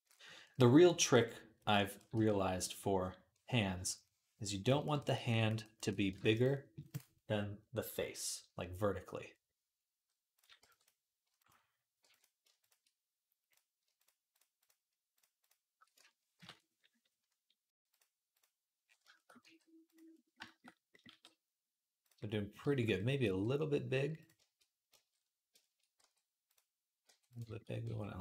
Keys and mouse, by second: 1.9 v, 6.0 ctrl+Tab, 10.2-14.3 middle drag, 10.4 b, 11.0 b, 11.8 b, 14.3 shift+click, 14.4 shift+middle click, 15.2 shift+click, 15.3 shift+middle click, 16.1 ctrl+p, 19.2 g, 20.9 g, 22.1-28.2 middle drag, 23.0 r, 25.8 r, 26.9 r, 27.7 s.